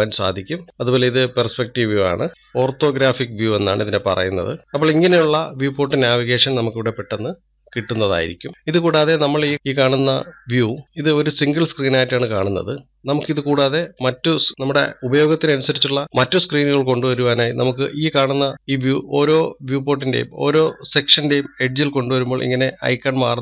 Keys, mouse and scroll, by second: 0.7 click, 2.0-2.3 middle drag, 2.3 click, 2.7-3.3 scroll down 2, 4.7-7.7 shift+middle drag, 8.5-9.5 scroll up 1, 11.6-23.4 drag.